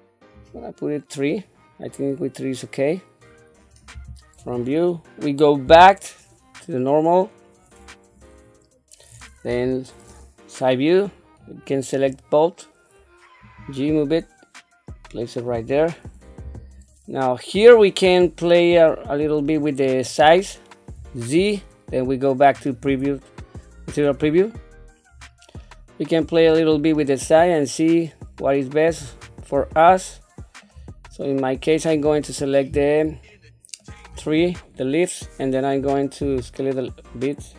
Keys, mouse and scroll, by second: 0.3 click, 2.2-3.6 middle drag, 3.9 KP_1, 4.5-5.2 scroll down 2, 5.6 /, 9.5 KP_3, 11.4 click, 13.4 g, 16.4 KP_1, 17.7-19.3 middle drag, 21.1 z, 24.2 scroll down 2, 25.1 scroll down 2, 25.6 middle click, 26.4 scroll up 2, 27.0-28.0 middle drag, 28.4 scroll up 1, 29.0 scroll down 1, 29.7 shift+middle click, 31.2 scroll up 1, 31.9 click, 33.3 shift+middle click, 36.2 s.